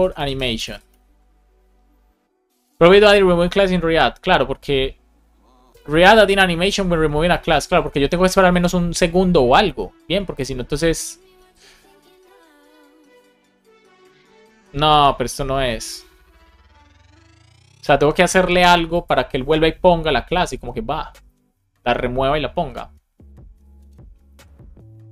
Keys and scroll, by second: 0.8 Return.